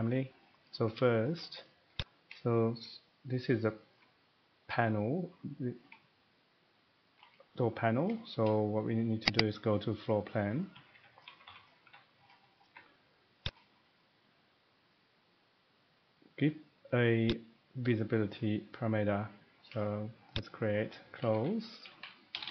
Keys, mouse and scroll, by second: 0.7 middle click, 1.3 shift+middle click, 2.0 click, 2.8 shift+middle click, 3.9 shift+middle click, 7.2 shift+middle click, 8.3 shift+middle click, 10.5 middle click, 10.9 Escape, 11.8 Escape, 12.1-12.7 middle click, 12.4 middle click, 12.6 middle click, 12.7 Escape, 13.5 click, 14.0 middle click, 17.3 click, 20.4 click, 21.3-22.5 typing.